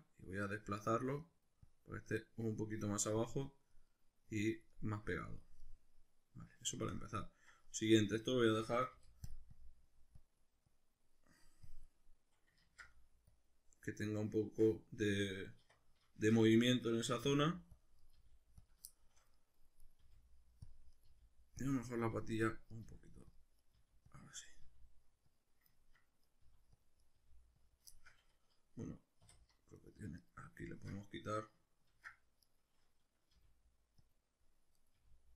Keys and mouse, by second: 0.3 click, 1.2 middle click, 1.7-2.8 drag, 2.8 middle click, 3.2 click, 3.9-5.2 middle drag, 5.2 click, 5.6-9.4 middle drag, 9.0 f, 9.6-16.4 drag, 12.6 ctrl+z, 14.4 Tab, 15.6 1, 16.2 shift+Tab, 16.4 right click, 17.3 g, 17.8 click, 18.0 right click, 18.2 g, 18.7 click, 18.9 shift+middle click, 19.8 right click, 20.0 g, 20.7 click, 21.0 right click, 21.1-24.6 typing, 21.6 click, 21.9 right click, 22.6 click, 22.7 right click, 23.4 click, 23.6 right click, 24.2 click, 24.5 right click, 25.4 click, 25.8 ctrl+middle click, 26.2 right click, 26.4 g, 26.8 click, 27.0 right click, 27.2 g, 27.7 click, 27.9-29.8 shift+middle drag, 29.2 2, 29.8 alt+right click, 30.2 alt+shift+right click, 31.9 ctrl+x, 32.4 right click, 33.3 g, 34.1 click, 34.7 right click, 34.9 g.